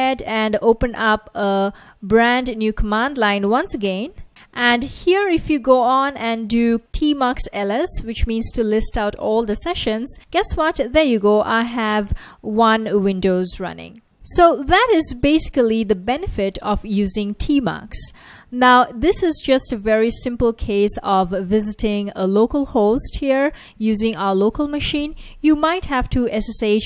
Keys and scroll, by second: 0.0-0.5 typing, 1.8 Return, 4.5-7.0 typing, 9.2 Return, 11.2 F1, 13.0 F1, 20.8 super+Tab.